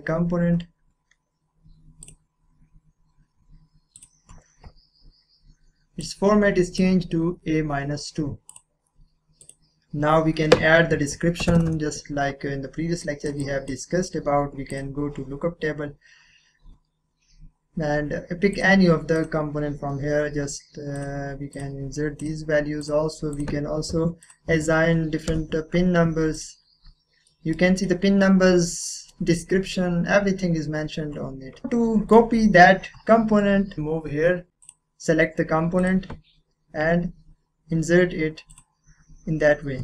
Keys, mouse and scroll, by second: 2.0 click, 2.0 typing, 2.7-3.9 scroll up 1, 3.9 click, 6.0-10.9 drag, 11.1 shift+s, 11.4 shift+t, 11.5 shift+a, 11.6 shift+t, 13.0-14.7 drag, 18.5 click, 23.9 1, 24.2 click, 24.5 1, 25.3 2, 26.3 click, 27.3 middle click, 31.6-32.1 scroll down 1, 32.1-33.8 middle drag, 33.8 click, 34.6 click, 38.5 click.